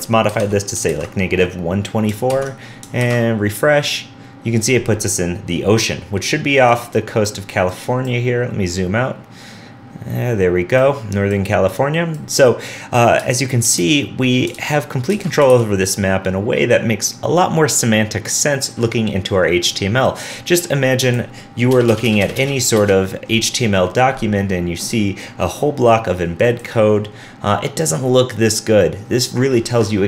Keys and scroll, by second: 0.9 super+s, 2.4 super+Tab, 3.0 super+r, 13.7 super+Tab, 14.5 super+z, 15.5 super+z, 15.7 super+s.